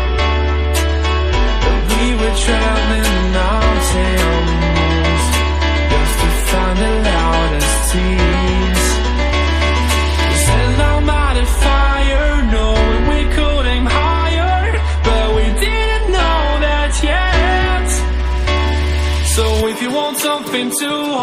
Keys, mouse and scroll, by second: 0.0 click, 0.7 click, 1.3-3.1 drag, 3.6 click, 4.2 scroll down 3, 4.5-5.1 middle drag, 5.1-6.9 drag, 7.9-9.3 drag, 9.5 click, 10.2 click, 11.6 KP_1, 12.1 scroll up 3, 12.3 click, 13.8 click, 14.8 click, 15.0-15.5 drag, 16.1 click, 16.8 drag, 19.0 shift+click, 19.9 ctrl+j, 20.1 ctrl+j, 20.5 click, 20.9 click.